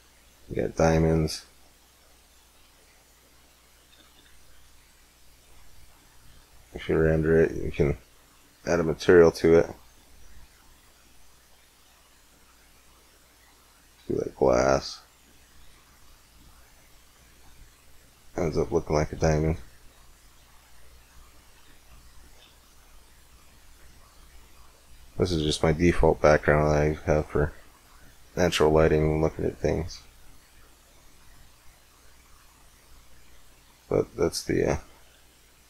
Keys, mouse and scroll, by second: 0.1 middle click, 0.9 middle click, 1.5-3.3 middle drag, 4.1 shift+z, 8.3-14.7 drag, 16.1 middle click, 16.3 middle click, 19.3 KP_5, 23.2 middle click, 23.7 middle click, 29.7-31.1 middle drag, 31.2 middle click, 33.5 x, 35.3 z.